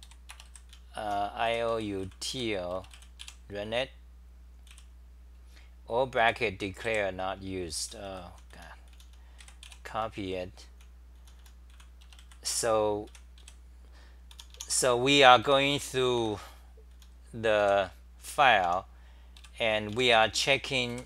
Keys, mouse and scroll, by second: 0.0 3, 1.2-2.8 typing, 4.7 w, 6.7-20.9 typing.